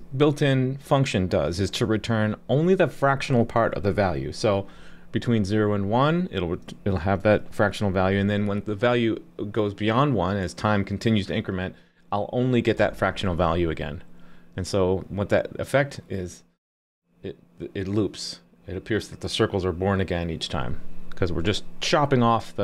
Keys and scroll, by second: 12.8 super+s.